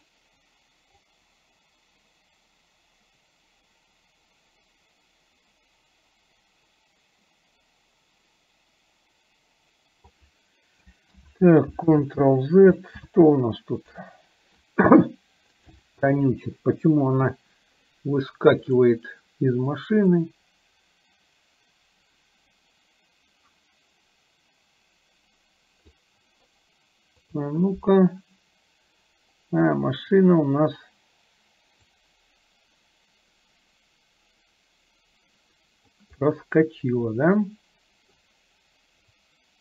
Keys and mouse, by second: 1.3-10.4 drag, 11.4 ctrl+z, 15.8 click, 18.7 click, 20.4-26.3 drag, 31.9-36.0 drag, 36.2-38.2 middle drag, 39.3-39.6 drag.